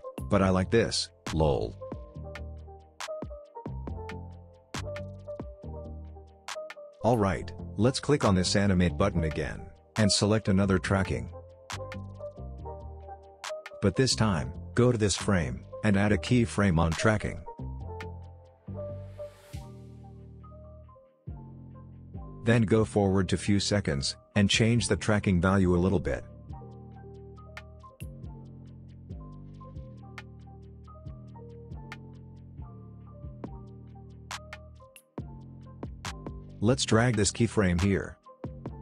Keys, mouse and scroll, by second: 0.8 space, 3.3-6.8 drag, 12.0-14.8 drag, 18.4 ctrl+z, 18.8-25.5 drag, 25.5-27.7 drag, 29.3 space, 31.2 space, 32.3-36.4 drag.